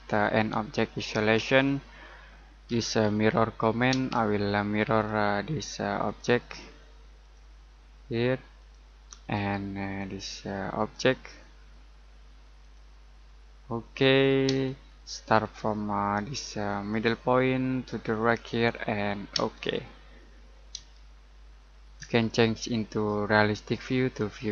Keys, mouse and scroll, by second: 2.6 m, 3.9 space, 4.5-4.9 scroll up 1, 4.9 click, 6.5 middle click, 7.2 click, 13.2 scroll down 1, 13.8 middle click, 14.4 space, 16.9 click, 19.3 space, 19.8-20.2 scroll down 1, 20.2 middle click, 20.9 shift+middle click, 22.8 click.